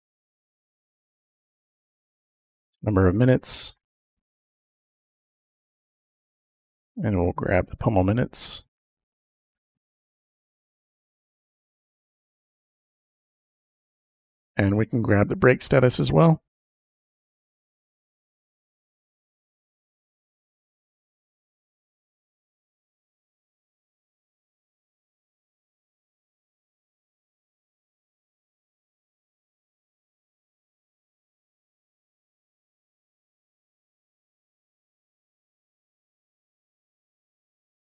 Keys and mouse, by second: 0.0-2.9 typing, 4.4 Right, 5.4 space, 7.7-9.5 drag, 10.0 ctrl+c, 11.2 click, 12.2 ctrl+v, 13.3 click, 13.9 BackSpace, 14.0 Return, 18.2-20.2 typing, 21.6 shift+0, 22.2 Left, 22.3 Left, 23.6-28.0 typing, 29.3 shift+;, 29.7 space, 30.3 Right, 31.3 ,, 31.3 space, 33.2-34.6 drag, 35.0 ctrl+c, 36.9 ctrl+v, 37.0 typing.